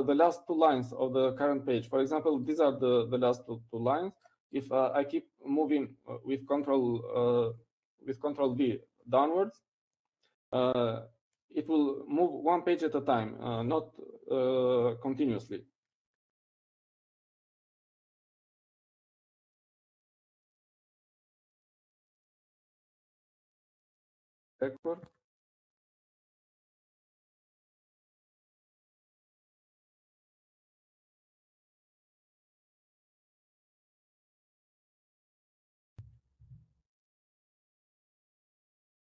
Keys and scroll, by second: 21.1 ctrl+v, 23.4 ctrl+v.